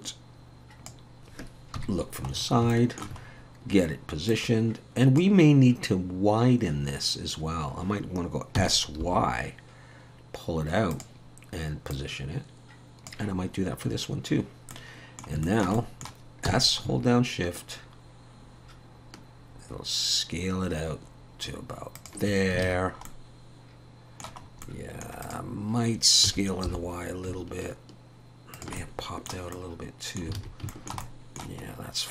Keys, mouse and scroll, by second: 1.8 KP_3, 2.3 scroll up 4, 2.7 shift+middle click, 3.2-4.3 scroll up 1, 4.3 click, 4.3 scroll up 1, 8.6 s, 11.9 click, 14.7 middle click, 15.4 shift+middle click, 15.8 middle click, 16.5 s, 22.6 alt+a, 22.8 scroll down 3, 23.1 middle click, 24.4-25.0 scroll up 2, 24.6 middle click, 25.2 click, 26.2 s, 28.8 shift+middle click, 29.5 middle click, 30.4 alt+a, 30.7 shift+middle click, 31.0 middle click, 31.6 scroll up 2.